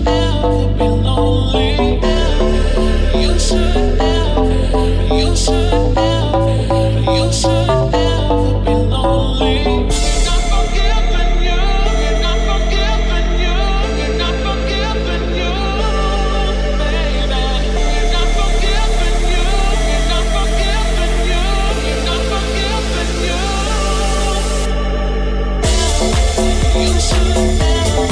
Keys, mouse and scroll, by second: 2.3 ctrl+r, 4.7 g, 6.5 ctrl+b, 9.7 alt+click, 9.8-11.6 alt+middle drag, 10.7 alt+z, 11.6-13.9 alt+drag, 12.2 r, 13.9-17.4 middle drag, 13.9 g, 17.4 alt+right click, 17.5-25.1 alt+middle drag, 18.9 s, 23.4 alt+z, 25.1 right click, 25.2 alt+middle click, 25.8 alt+shift+right click, 25.9-28.1 alt+shift+middle drag, 26.1 alt+z, 26.3 s, 27.4 alt+z.